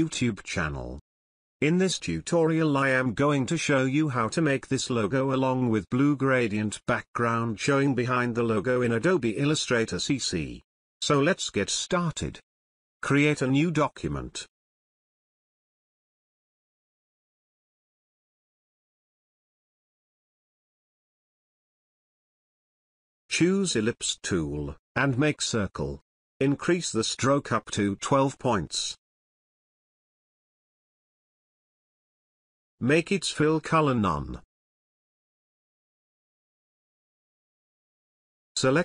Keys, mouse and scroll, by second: 2.0-14.2 drag, 18.6-22.3 drag, 25.1-26.6 alt+shift+drag.